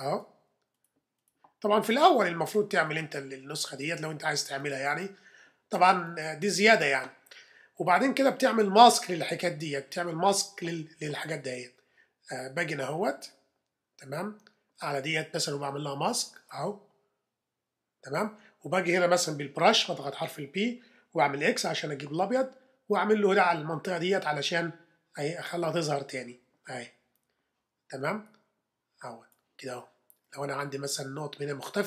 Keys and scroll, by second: 19.6 b, 21.3 x.